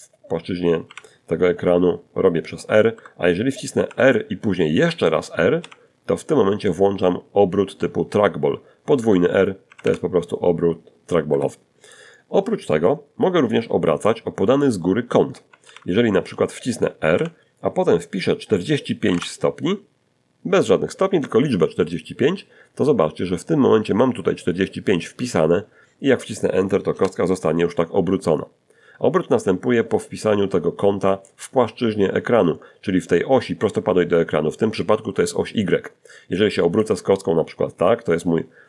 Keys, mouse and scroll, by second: 1.1 Escape, 2.1 r, 3.8 r, 7.2 Escape, 7.8 r, 8.8 r, 9.5 Escape, 13.8 alt+r, 15.3 r, 17.0-17.9 typing, 25.1 Return, 34.5 middle click, 37.0 middle click, 37.0-37.6 scroll down 1, 37.8 scroll up 1, 38.3 shift+middle click.